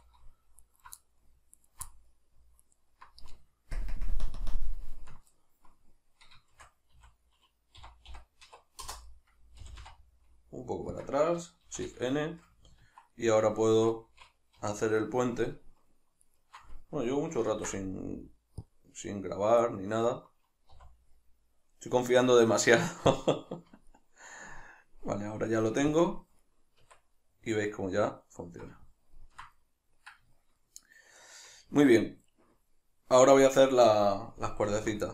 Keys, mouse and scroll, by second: 0.7 alt+right click, 1.0-1.6 middle drag, 1.6 alt+right click, 1.9-2.7 middle drag, 2.7 alt+right click, 3.8 ctrl+KP_Add, 4.3 ctrl+KP_Subtract, 6.5 shift+d, 8.9 Return, 9.1-11.0 middle drag, 9.6 g, 11.0 click, 11.6 shift+n, 12.0-15.0 shift+middle drag, 14.6 2, 15.0 alt+right click, 16.2 alt+shift+right click, 17.5 ctrl+s, 20.1-26.0 middle drag, 20.7 w, 26.0-26.9 drag, 26.9 Tab, 27.2-35.1 middle drag, 34.7 alt+q.